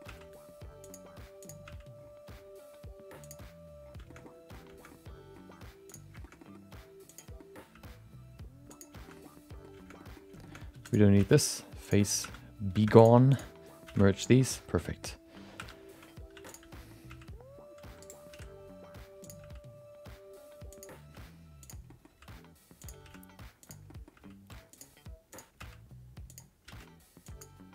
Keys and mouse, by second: 0.1 g, 1.4 click, 1.6 g, 4.1 middle click, 4.9 middle click, 5.8 click, 6.2 middle click, 6.3 middle click, 7.1 click, 7.3 middle click, 7.7 g, 9.3 middle click, 10.1 middle click, 10.4 shift+middle click, 10.7 3, 10.8 click, 11.1 x, 12.2 2, 12.7 1, 12.9 click, 13.3 shift+click, 13.8 shift+x, 14.2 middle click, 14.7 middle click, 15.5 2, 16.4 click, 16.4 3, 16.7 middle click, 17.0 g, 18.3 r, 19.4 g, 21.6 click, 21.8 middle click, 22.8 g, 23.0 r, 23.9 middle click, 24.7 g, 25.3 click, 25.5 g, 26.6 r.